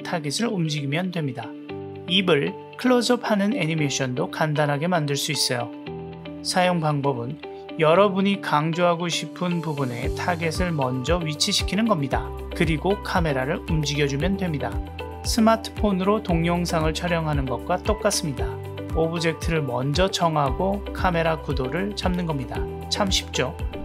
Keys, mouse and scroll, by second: 1.5 g, 2.7 click, 2.9 g, 6.4-7.4 drag, 7.4 g, 10.0 g, 12.0 g, 14.4 click, 15.3 g, 16.8 middle drag, 17.7 g, 18.5 g, 21.0-21.6 drag, 22.0 click, 22.2 g.